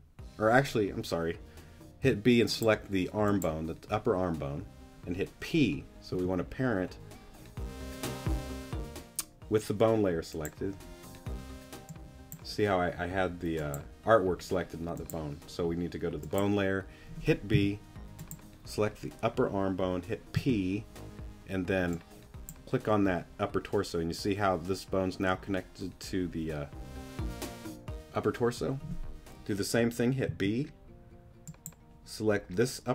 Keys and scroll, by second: 2.0 b, 6.1 p, 17.5 b, 20.3 p, 30.3 b.